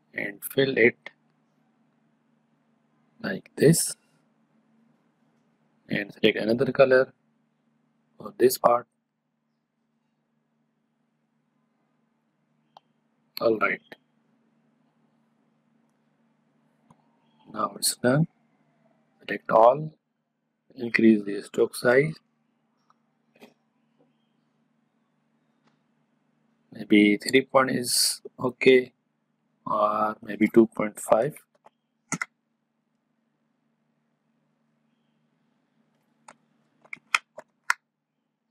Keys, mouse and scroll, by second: 13.6-18.8 drag, 18.8 scroll up 1, 19.4-20.4 scroll up 1, 21.3 click, 30.0-33.0 drag, 33.5-38.5 drag.